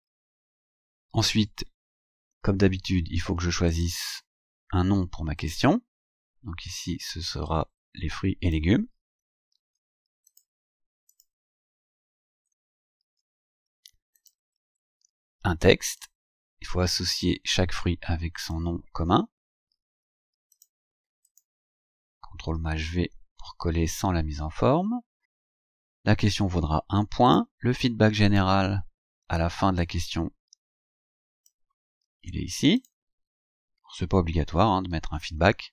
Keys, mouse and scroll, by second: 1.8 scroll down 2, 3.7 click, 5.4 click, 7.5-8.8 drag, 9.6 ctrl+c, 10.4 click, 11.2 click, 13.1 ctrl+v, 14.2 click, 16.0-18.8 drag, 19.8 ctrl+c, 20.6 click, 21.3 click, 22.6 ctrl+shift+v, 23.6-24.0 scroll down 2, 24.8 scroll down 2, 25.6 scroll down 2, 27.3 click, 28.3 click, 29.8-31.7 drag, 32.1 ctrl+c, 32.8 click, 35.0 ctrl+shift+v.